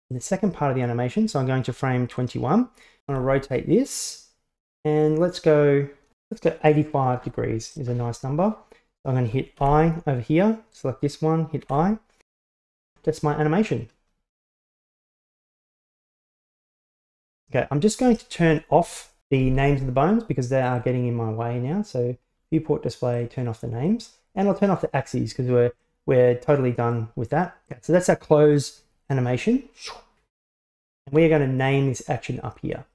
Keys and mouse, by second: 0.2 right click, 1.4 click, 3.2 r, 9.6 i, 10.8 right click, 11.7 i, 12.7-14.5 drag, 14.7-15.3 middle drag, 16.6-17.4 drag, 20.8 click, 23.2 click, 23.9 middle click, 25.4 click, 25.8-27.0 middle drag, 27.7-30.8 drag.